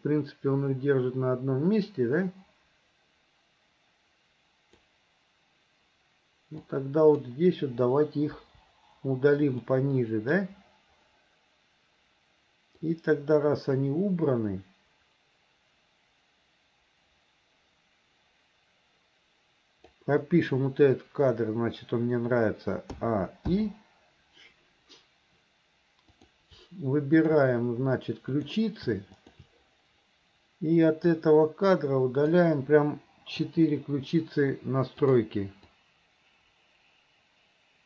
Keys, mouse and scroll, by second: 6.6-7.2 drag, 8.4 Delete, 9.7-10.4 middle drag, 12.9-20.0 drag, 23.0 a, 23.5 i, 26.2 click, 27.2 shift+click, 28.3 click, 29.2 shift+click, 31.1-32.4 drag, 35.1 click, 35.7-37.8 drag.